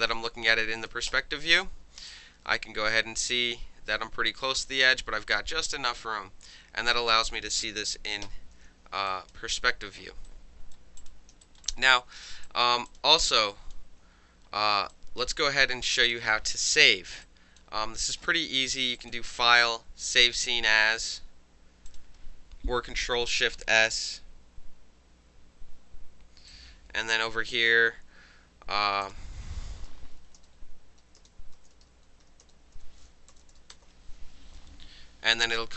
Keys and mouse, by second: 0.9 middle click, 1.1 space, 1.7-2.1 alt+middle drag, 2.1-4.8 alt+drag, 4.8-6.0 alt+middle drag, 6.0-7.6 alt+drag, 8.2 4, 9.1 alt+click, 10.3-10.7 drag, 11.0 click, 11.4 alt+right drag, 11.6 alt+middle drag, 11.7 alt+drag, 11.9-12.4 alt+middle drag, 12.4 alt+drag, 12.6 alt+middle drag, 12.9 click, 13.0-13.4 alt+middle drag, 13.4-13.7 alt+drag, 13.7-14.9 alt+middle drag, 14.9-16.1 alt+drag, 16.1-17.2 alt+middle drag, 17.2 alt+click, 17.6-18.0 alt+middle drag, 18.3-19.0 alt+middle drag, 19.0 alt+click, 19.1-20.3 alt+middle drag, 21.9 click, 26.5-27.7 drag, 29.0 click, 30.0-33.3 typing.